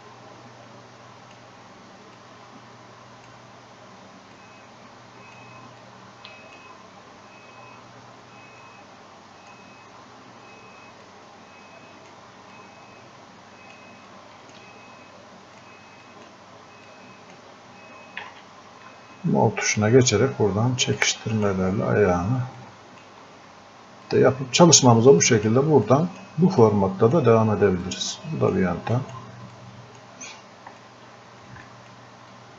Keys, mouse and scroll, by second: 18.2 ctrl+z, 19.7-31.7 drag, 32.4-32.5 drag.